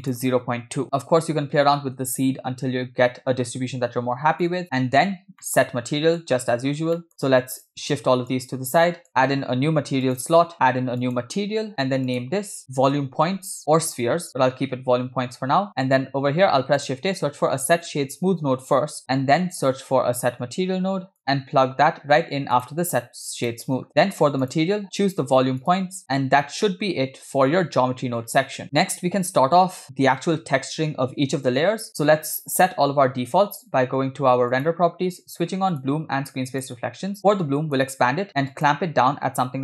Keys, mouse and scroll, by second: 0.0-4.5 drag, 5.1 scroll down 3, 5.5 middle click, 6.8 scroll down 1, 7.0 middle click, 7.2-7.7 drag, 8.3-9.1 drag, 9.1 middle click, 10.1 click, 11.1-11.4 drag, 12.1-14.3 drag, 15.7 middle click, 16.2 shift+a, 19.7 shift+s, 20.6 shift+a, 23.8 scroll up 6, 23.9 middle click, 24.4-25.8 drag, 26.2-26.5 scroll down 8, 26.7 middle click, 28.4 scroll down 1, 34.6 click, 35.8 drag, 36.6 click, 37.6 click, 38.6-39.6 drag.